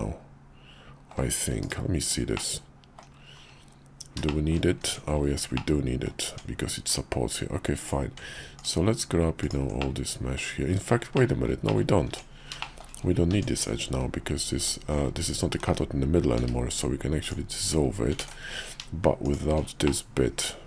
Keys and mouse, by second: 1.6 /, 2.3 middle click, 4.3 shift+click, 4.8 Tab, 5.5 middle click, 6.3 Tab, 7.8 click, 8.6 ctrl+click, 9.4 ctrl+click, 9.8 middle click, 11.1 middle click, 11.7 middle click, 12.1 Tab, 12.6 shift+click, 13.3 Tab, 14.6 alt+click, 16.4 x, 18.2 ctrl+z, 19.2 shift+click, 19.9-20.6 middle drag.